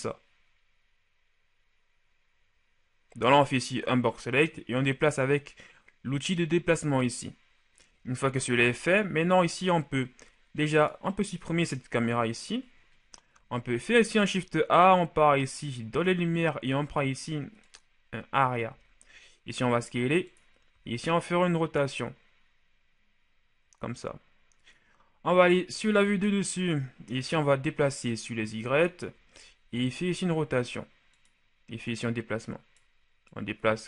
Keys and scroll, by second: 8.4 shift+a, 11.9 Delete, 13.7 shift+a, 18.6 s, 25.6 KP_7, 29.5 shift+r.